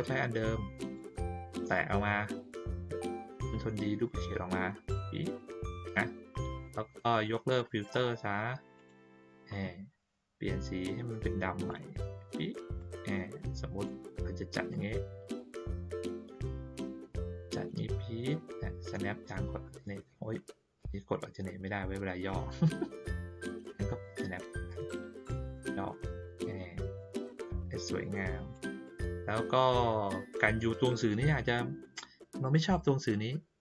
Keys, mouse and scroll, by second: 0.8 click, 4.0-6.5 drag, 7.5 click, 8.7 click, 11.6 click, 12.7-13.8 drag, 14.7 click, 16.9-23.1 drag, 24.0 click, 25.5-26.4 drag, 26.9-28.5 drag, 28.8 click.